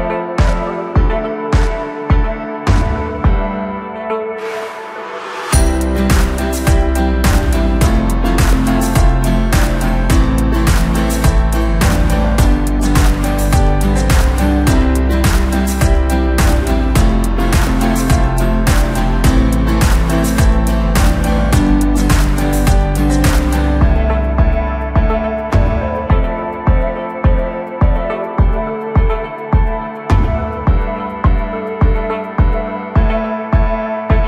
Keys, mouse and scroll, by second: 1.3-4.4 drag, 5.0 click, 6.3 click, 7.0 click, 7.1-10.6 drag, 11.4 click, 12.6 click, 13.4-14.9 drag, 18.3-19.0 scroll down 6, 19.9-22.3 drag, 22.7-24.1 scroll up 1, 24.1 click, 24.6 click, 26.0-27.5 drag, 27.5-29.6 scroll down 4, 29.6-30.2 scroll up 1, 30.2 click, 32.6 click, 33.1-34.2 middle drag.